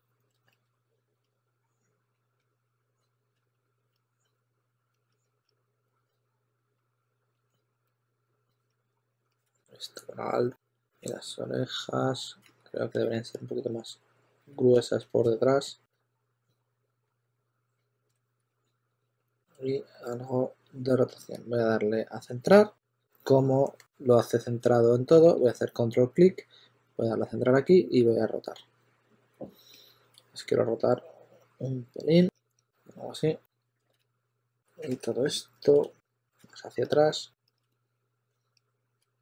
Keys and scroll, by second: 1.0 2, 1.2 2, 2.3 s, 3.3 s, 3.9 s, 5.0 s, 5.4 s, 6.9 2, 7.8 shift+s, 9.1-11.0 typing, 12.4 s, 12.8 2, 15.8 s, 16.6 2, 17.0 s, 19.3 e, 25.2 w, 32.1 q, 33.6-34.6 typing, 34.9 super+z, 36.0 2, 36.4 s, 38.9 super+z, 39.1 s.